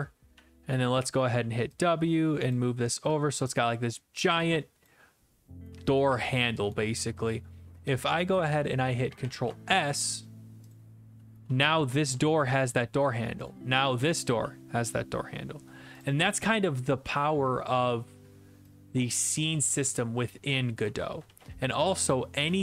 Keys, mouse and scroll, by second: 0.0 click, 0.3 typing, 2.5 click, 3.5 click, 4.9 click, 5.8-7.2 typing, 6.7 click, 8.3 click, 9.2 ctrl+s, 10.7 click, 11.2-12.4 typing, 12.5 right click, 13.5 click, 13.7-14.9 typing, 14.9 right click, 17.0 click, 21.3 ctrl+s, 22.1 click, 22.5 click.